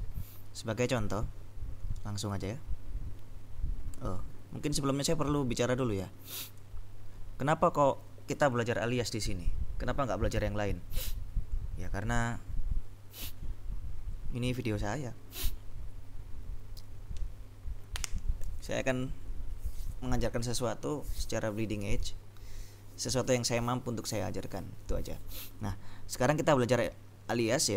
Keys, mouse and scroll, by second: 1.3 click, 6.7-9.0 drag.